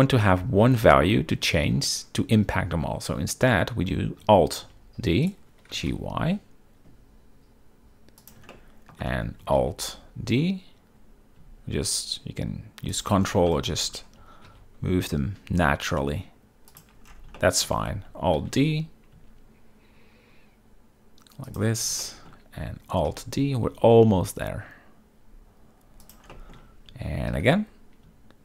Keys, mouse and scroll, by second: 4.7 alt+d, 5.4-5.8 right drag, 5.8 g, 6.0 y, 8.6-9.1 shift+middle drag, 9.7 alt+d, 13.6 shift+middle drag, 13.6 shift+scroll, 14.6 alt+d, 17.5-17.8 shift+middle drag, 18.5 alt+d, 22.1 shift+middle click, 23.2 alt+d, 26.1 shift+drag, 26.4 shift+middle drag, 27.4 alt+d.